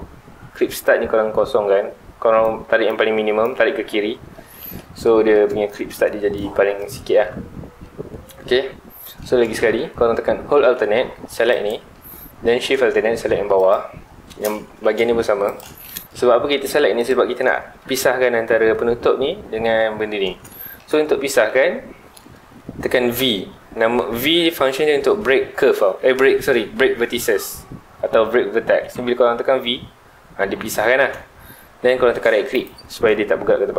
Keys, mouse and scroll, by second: 0.8-4.4 drag, 4.4 scroll down 2, 4.5-7.4 middle drag, 7.4-7.8 scroll up 2, 7.8-9.4 middle drag, 9.4 alt+a, 9.7-11.5 middle drag, 11.5 alt+click, 12.0-13.6 middle drag, 13.6 alt+shift+click, 14.6 middle click, 15.4 alt+shift+click, 15.8-17.0 middle drag, 17.0 alt+shift+click, 20.4 scroll down 2, 20.6-21.6 shift+middle drag, 21.6-22.2 scroll up 1, 22.2-25.4 middle drag, 32.6-33.7 right drag.